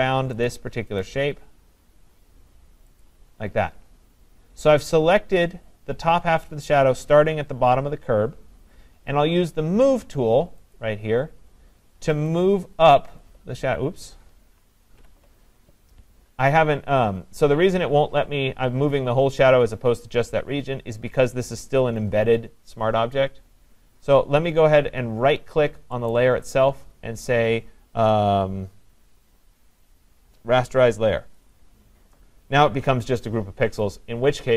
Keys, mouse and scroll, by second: 0.5 click, 1.1 click, 3.1 click, 10.8 click, 13.6 click, 14.9 ctrl+z, 26.1-31.2 right drag, 31.5 click.